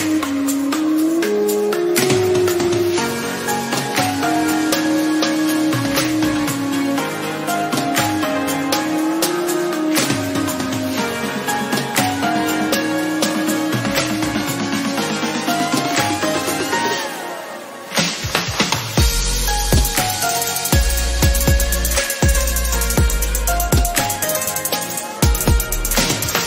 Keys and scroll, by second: 21.0 ctrl+alt+z.